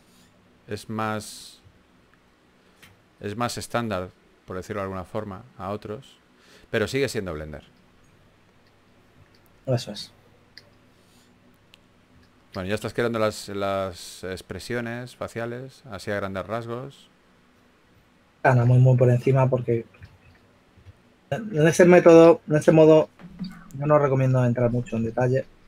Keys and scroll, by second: 0.8-2.2 typing, 2.7 super+z, 14.6-15.9 typing, 17.2-18.8 typing, 21.2 2, 23.1-23.9 typing.